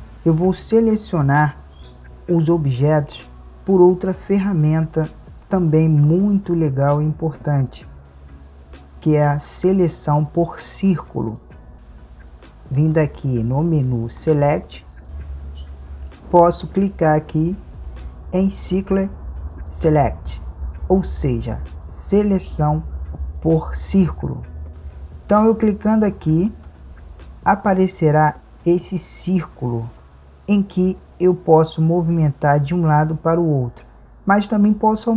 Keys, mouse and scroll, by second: 11.7-15.0 drag.